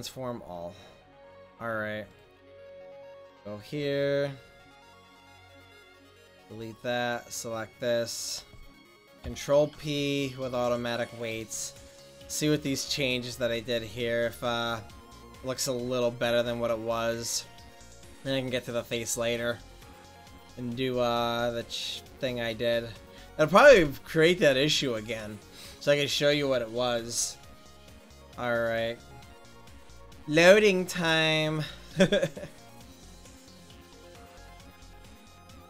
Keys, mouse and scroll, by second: 2.1-5.7 right drag, 5.7-9.2 drag, 7.1-9.2 right drag, 9.2 ctrl+p.